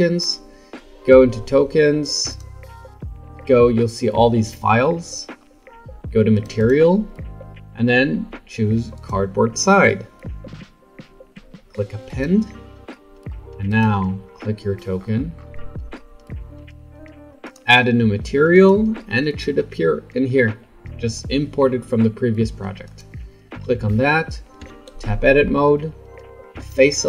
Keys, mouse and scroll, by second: 12.9-13.7 middle drag, 13.7 click, 15.0-17.4 scroll up 8, 17.4-21.7 drag, 24.6 Tab, 25.1-26.6 middle drag, 26.6 click.